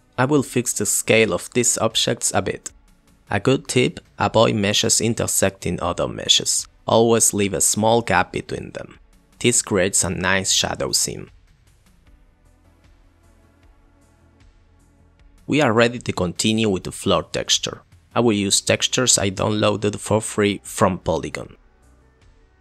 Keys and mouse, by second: 0.6 middle click, 0.8 middle click, 1.0 click, 3.8 s, 6.2 g, 8.1 g, 11.8 click, 12.0 shift+click, 12.6 s, 15.9 click, 16.0 click.